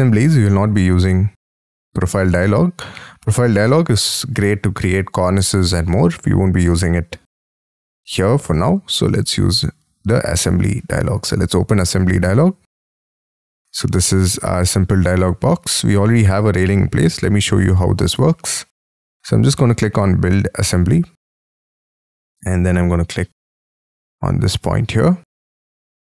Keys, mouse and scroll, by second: 4.4 middle click, 17.0 middle click, 21.1-21.8 scroll up 5, 21.8 middle click, 22.0 scroll down 1, 22.4-24.2 scroll up 17, 24.2-25.3 scroll up 12, 25.3-25.8 scroll down 19, 25.8 scroll up 1.